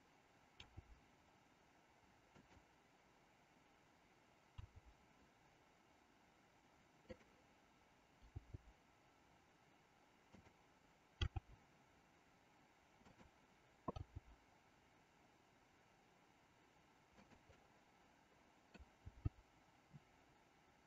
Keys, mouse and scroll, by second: 0.6 g, 4.5 r, 8.3 g, 11.3 r, 14.0 g, 17.6-18.9 middle drag, 19.1 g.